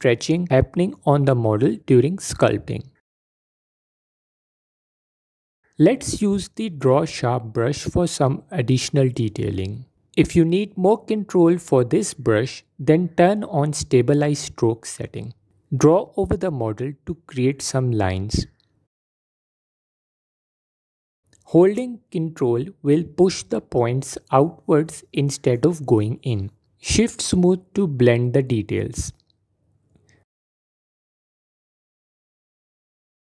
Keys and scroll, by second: 3.0 f, 3.6 f, 17.9 f, 26.9 f, 29.5 g.